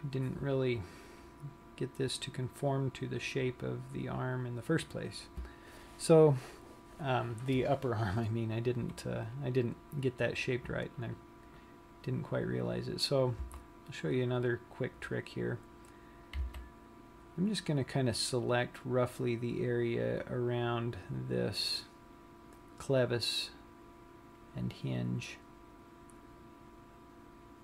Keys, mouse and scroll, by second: 14.0 a, 17.0 c.